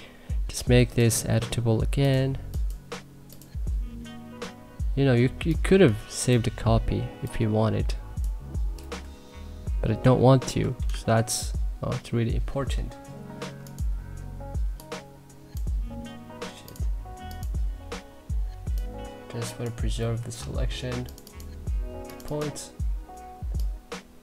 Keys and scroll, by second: 8.8 Delete, 10.8 ctrl+z, 20.0 Delete.